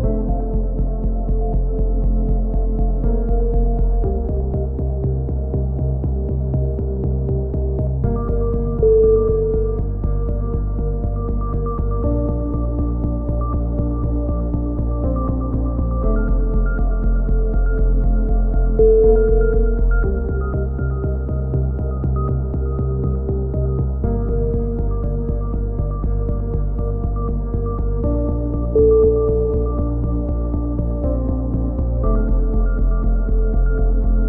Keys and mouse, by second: 0.6-2.6 right drag, 0.8 a, 2.6 middle click, 3.4 click, 4.3 ctrl+z, 4.3 click, 5.2 click, 5.7 a, 5.8 click, 6.4-8.5 right drag, 7.8-9.6 drag, 9.0 a, 10.2 click, 10.9 KP_3, 11.3 Tab, 11.3 a, 11.7 click, 13.9 click, 13.9-18.0 typing, 14.3 Tab, 14.7 ctrl+r, 15.4 ctrl+r, 16.0 ctrl+r, 16.2 click, 16.6 ctrl+z, 16.8 ctrl+z, 17.2 ctrl+r, 17.4 click, 17.8 ctrl+r, 18.2 click, 20.1 click, 20.7 a, 22.4 ctrl+z, 23.1 ctrl+KP_3, 23.8 alt+shift+s, 25.5 alt+shift+s, 25.8 ctrl+z, 26.9 ctrl+z, 28.7 alt+shift+s, 29.4 a, 29.6-32.3 right drag, 30.7 a, 32.3 alt+shift+s, 32.6-34.2 right drag.